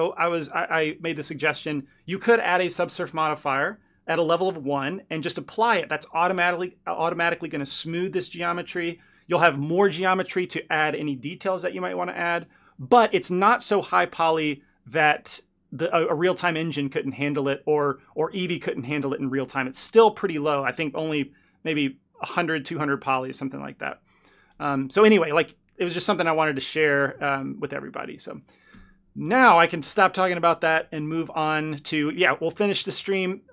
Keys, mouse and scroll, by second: 0.2 click, 1.9 ctrl+click, 2.7 s, 4.7 click, 5.4 ctrl+click, 5.7 shift+click, 6.6 s, 8.5 click, 9.3 ctrl+click, 10.1 s, 11.7 Tab, 16.2 click, 21.0 click, 22.1 Tab, 23.3 1, 24.2 click, 25.9 ctrl+click, 26.7 s, 28.7 click, 29.4 ctrl+click, 29.7 shift+click, 30.6 s.